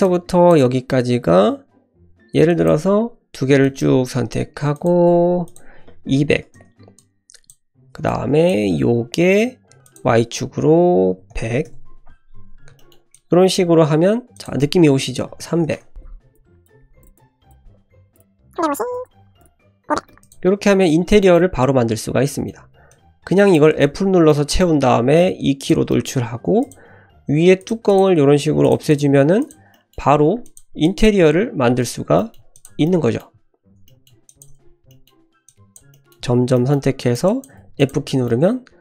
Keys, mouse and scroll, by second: 0.0 click, 2.5 click, 3.6 click, 4.7-6.6 drag, 6.3 KP_0, 6.9 click, 8.0 click, 9.8-12.2 drag, 11.4 KP_0, 12.5 scroll down 1, 12.7 shift+middle click, 13.1 click, 14.3-16.0 drag, 15.5 KP_0, 16.1 scroll down 2, 16.3 click, 17.0 click, 17.1 click, 18.1 click, 18.9 click, 19.3 click, 20.0 KP_0, 20.2 click, 20.6-21.1 scroll up 1, 21.1 scroll up 1, 21.2 shift+middle click, 21.7-22.2 scroll down 1, 22.2 middle click, 22.2 scroll down 1, 22.9 click, 23.8 f, 24.3 middle click, 24.9 e, 25.9 middle click, 26.2 3, 26.6 click, 27.0 x, 27.8 click, 28.1 x, 28.9 click, 29.0 x, 29.7 middle drag, 30.2 1, 30.4 drag, 30.8 shift+drag, 31.2 f, 32.2 middle click, 32.5 shift+drag, 32.8-33.2 middle drag, 33.8 middle drag, 34.3 shift+click, 34.6 f, 34.9 middle drag, 35.4-35.7 drag, 35.9 middle drag, 36.5 middle click, 37.0 shift+click, 37.3 shift+click, 37.6 f, 37.8 click, 38.1 middle click, 38.2 scroll up 1, 38.4 Tab.